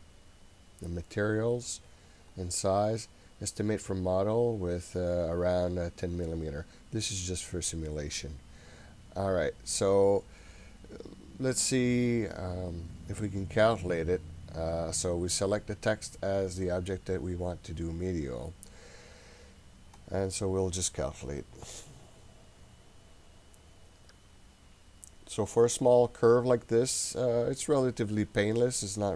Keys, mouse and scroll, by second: 2.4 click, 8.2 click, 10.2-12.3 scroll up 2, 20.0-25.5 drag, 28.6-29.1 middle drag.